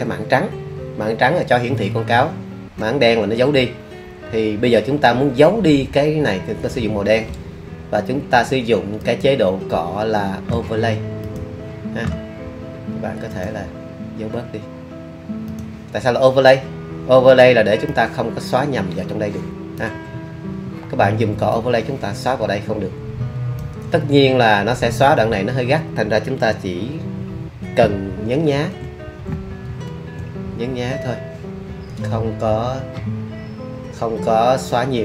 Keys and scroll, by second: 28.5 super+z, 29.6 super+z.